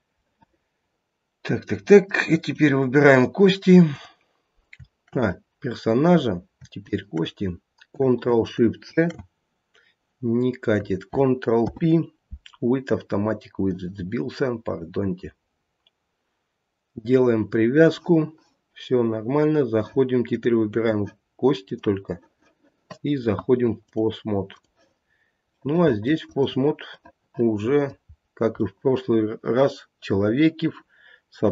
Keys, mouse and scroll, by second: 0.3 middle click, 2.4 click, 3.9 click, 5.1 click, 6.2 scroll up 2, 6.8 shift+click, 8.9 ctrl+shift+c, 11.5 ctrl+p, 20.2 click, 21.5 click, 25.3 scroll down 1, 25.6 middle click, 26.2 click, 27.0 middle click, 27.7 middle click, 28.0 scroll up 1, 28.6 middle click, 29.7 middle click.